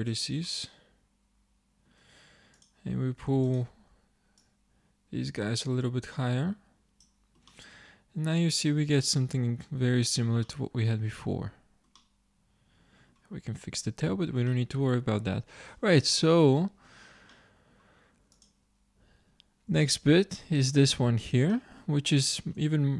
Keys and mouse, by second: 3.0-6.0 drag, 7.6-9.1 middle drag, 9.6 middle click, 10.6 middle click, 11.2 Tab, 14.1-16.3 middle drag, 18.8-20.2 drag, 21.0 Tab, 21.0 click, 22.6 Tab.